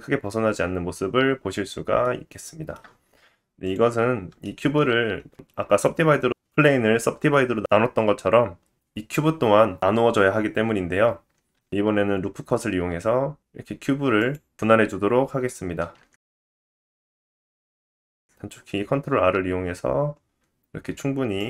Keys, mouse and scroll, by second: 3.6-5.4 drag, 4.4 shift+middle click, 4.8 scroll up 1, 9.8 Tab, 11.5 ctrl+r, 18.0 ctrl+r, 21.0-21.4 drag.